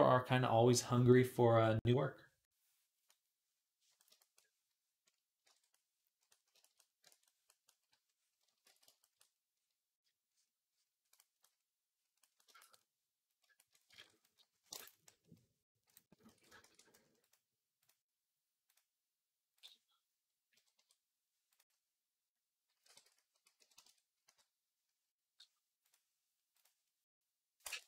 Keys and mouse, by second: 3.0 middle click, 3.4-5.2 drag, 5.3 ctrl+Tab, 5.7-8.5 right drag, 7.6 i, 7.9-11.5 drag, 7.9 middle click, 8.5 ctrl+z, 11.5-13.6 middle drag, 13.7 ctrl+Tab, 16.1 ctrl+s, 16.4 shift+a, 18.5 ctrl+s, 18.5 click, 18.5 shift+a, 22.1-24.3 drag, 22.7 r, 24.0 KP_3.